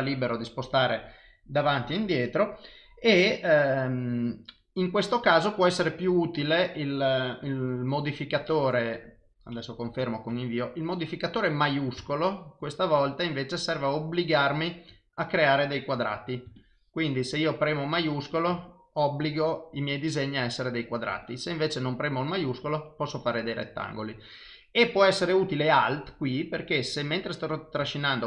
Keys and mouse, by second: 10.8 click, 16.6 shift+click, 18.3 click, 21.2 click, 25.1 click.